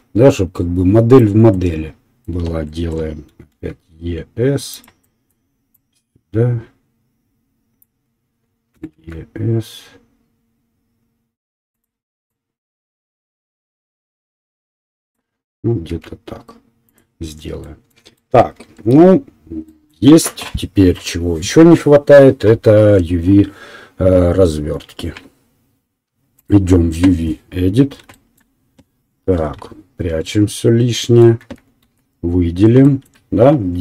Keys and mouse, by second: 3.3 e, 8.7 e, 11.3 click, 11.9 middle click, 12.3-17.0 drag, 16.0 s, 17.0-26.5 middle drag, 19.1 Tab.